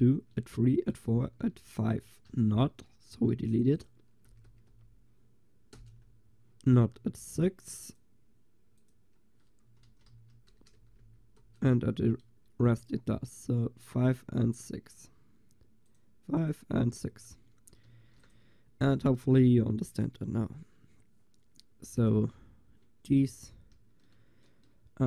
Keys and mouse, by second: 0.7-3.6 middle drag, 3.6 click, 4.5 BackSpace, 8.1 click, 10.8 BackSpace, 15.9-20.6 drag, 17.9 ctrl+s, 22.0-23.7 drag, 23.7 middle click.